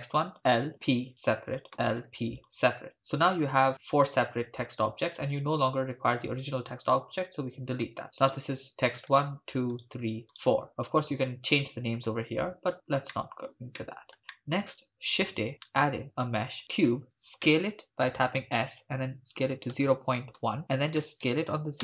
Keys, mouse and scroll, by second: 0.4 l, 0.7 p, 1.8 l, 2.0 p, 5.2 click, 7.3 Delete, 8.3-9.8 drag, 8.3 right click, 9.1 right click, 9.8 right click, 10.4 right click, 13.2 shift+middle drag, 13.8 middle click, 14.3 shift+middle drag, 15.0 shift+a, 17.5 s, 19.3-21.8 typing, 20.6 Return.